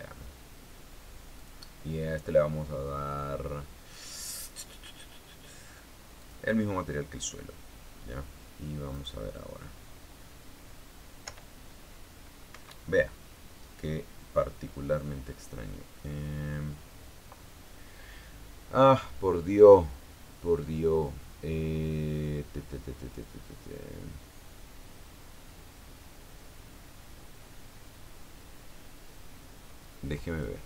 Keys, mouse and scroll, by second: 2.1 click, 6.9 click, 9.6 right click, 11.9 p, 13.2 Escape, 21.3-21.7 scroll down 2, 22.3-23.2 scroll down 6, 23.9-25.6 scroll down 4, 26.5-27.4 scroll down 3, 30.5 click.